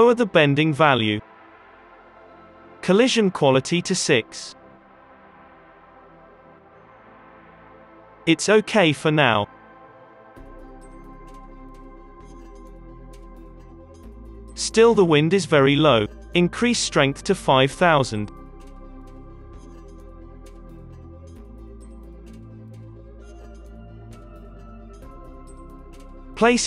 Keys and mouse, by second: 0.8 click, 1.5-5.8 middle drag, 5.8 click, 6.4 click, 6.7 space, 8.0 space, 8.8 space, 9.2 space, 9.3 middle click, 9.8 alt+a, 10.4 middle click, 13.7 space, 14.2 space, 14.3-17.9 middle drag, 19.0 space, 19.5 space, 20.5 KP_0, 20.6 KP_0, 21.2 space, 23.1 space, 24.5 KP_3, 25.0 r, 25.4 g, 26.5 space.